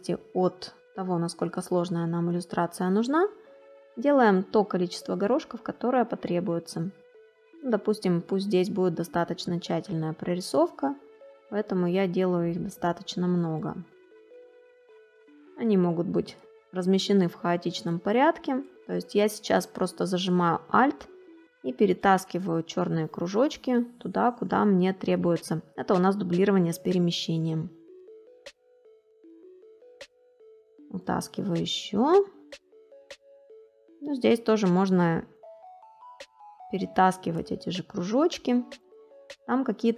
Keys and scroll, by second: 28.0 space.